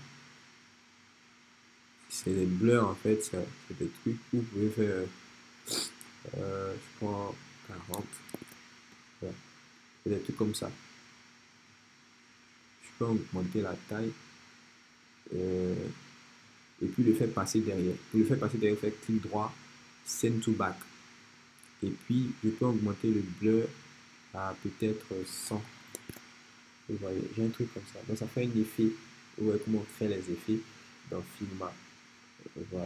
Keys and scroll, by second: 7.7 shift+4, 8.0 shift+0, 8.4 Return, 25.1-26.0 typing, 26.0 shift+Return.